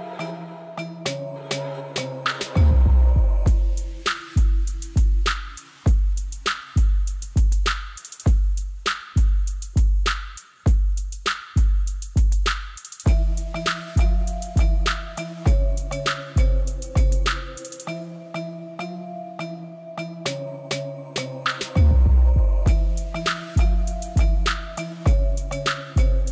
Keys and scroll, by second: 1.7 g, 1.9 x, 3.9-5.9 typing, 4.4 Return, 8.5 alt+d, 10.0 x, 12.4 shift+d, 12.6 y, 13.8 g, 13.9 z, 17.9 Tab, 20.3-21.8 typing, 21.0 Return, 22.0 Return, 26.1-26.3 typing.